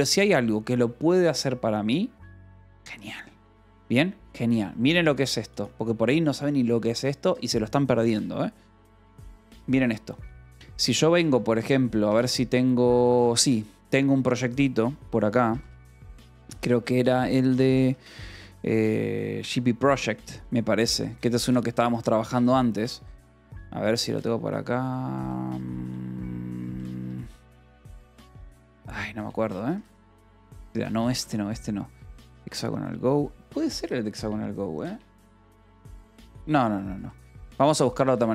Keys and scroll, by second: 10.8 :, 13.9 j, 15.1 k, 15.4 j, 16.2 k, 16.7 j, 17.7 k, 18.7 j, 19.3 Return, 20.2 j, 21.1 Return, 23.0 j, 23.3 Return, 24.7 :, 27.0 k, 27.2 Return, 27.9 shift+;, 28.2 j, 28.6 Return, 29.6 =, 30.6 j, 30.9 k, 33.0 j, 33.6 Return, 35.3 j, 35.6 Return, 36.2 :, 37.9-38.3 typing.